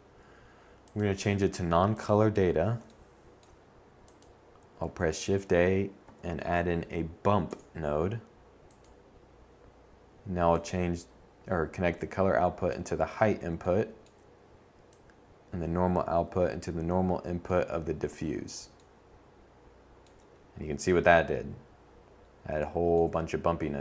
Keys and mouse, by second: 2.5 shift+a, 6.5-10.4 drag, 12.5-15.1 drag.